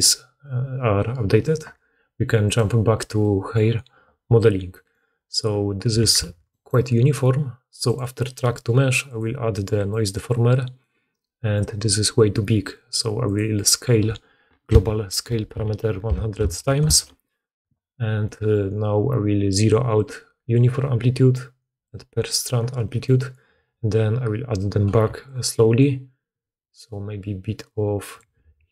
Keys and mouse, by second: 2.4 middle click, 2.4 right click, 6.2 alt+a, 7.8 middle click, 7.9-9.0 drag, 9.0-15.7 middle drag, 15.7 0, 18.2 middle click, 25.3-27.2 shift+middle drag.